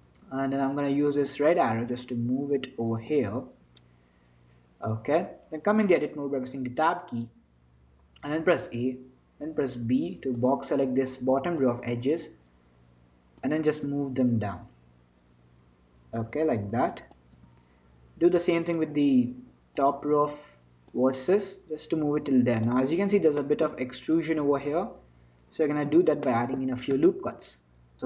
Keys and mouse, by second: 1.4-3.3 drag, 3.6 Tab, 4.9 z, 6.0 Tab, 6.8 Tab, 8.7 a, 9.6 b, 13.6-15.6 drag, 17.6 a, 18.5 b, 21.6-23.6 drag, 23.6-27.9 middle drag.